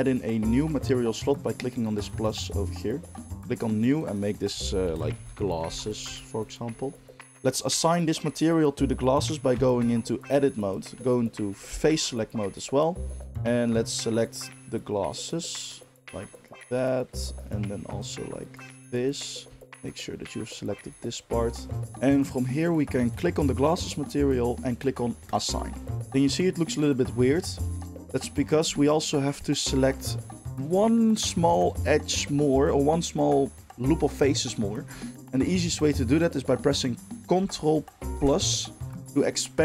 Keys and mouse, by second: 2.2-3.9 drag, 3.9 middle click, 4.0-13.3 drag, 9.7 Tab, 11.8 3, 13.3 middle click, 14.2-15.2 shift+drag, 15.2-16.3 shift+middle drag, 16.3-19.2 shift+drag, 19.2-20.7 shift+middle drag, 20.7-21.8 shift+drag, 21.8-23.4 middle drag, 23.4 click, 23.6-25.2 middle drag, 25.2-27.5 drag, 26.4 middle click, 26.8 middle click, 27.5 shift+middle click, 27.8-29.4 shift+drag, 29.4 middle click, 29.5-39.6 drag, 38.3 ctrl+KP_Add.